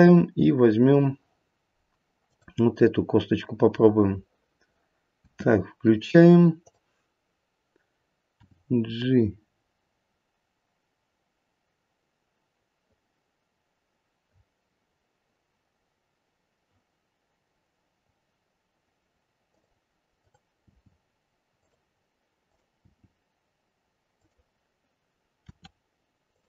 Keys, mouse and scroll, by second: 1.5-2.2 scroll down 1, 2.2-3.5 scroll down 1, 3.5 click, 5.1 space, 6.6 click, 8.3 g, 20.2 click, 20.6 g, 22.4 click, 22.8 g, 25.4 r.